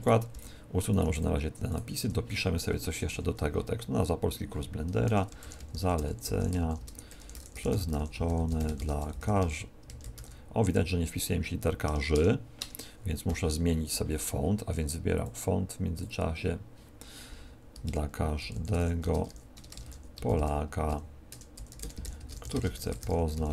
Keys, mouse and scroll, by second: 0.2 x, 0.8 right click, 0.9 x, 1.6 right click, 1.9 Tab, 2.8 Up, 3.0 End, 4.9 Return, 5.3-10.1 typing, 11.8 BackSpace, 12.1 BackSpace, 12.5 BackSpace, 13.2 a, 15.1 click, 17.8-23.5 typing, 21.3 Return.